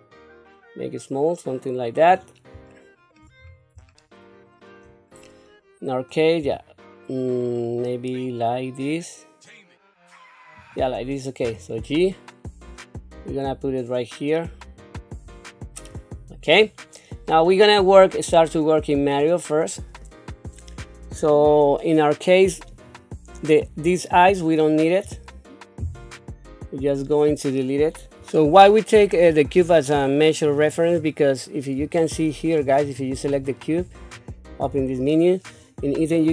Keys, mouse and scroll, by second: 2.9 shift+middle click, 3.4 scroll up 3, 4.0 shift+middle click, 5.1-6.1 scroll down 2, 6.4 s, 11.4 g, 15.4 shift+middle click, 16.1-16.6 scroll up 2, 16.8 shift+middle click, 17.7-18.1 scroll up 2, 18.3 shift+middle click, 19.6-22.1 scroll down 1, 22.9 click, 23.8 click, 29.6 click, 30.9 scroll down 1, 32.0 shift+middle click, 32.8 click, 33.2 click, 34.6 n.